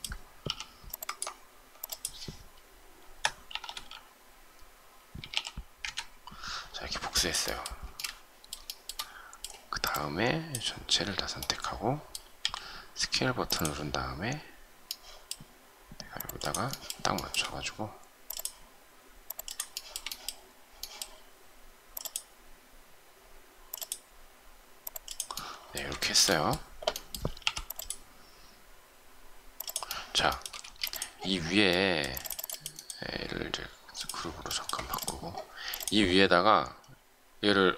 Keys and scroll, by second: 5.4-6.1 typing, 7.8 shift+space, 27.4 m, 30.6 shift+space.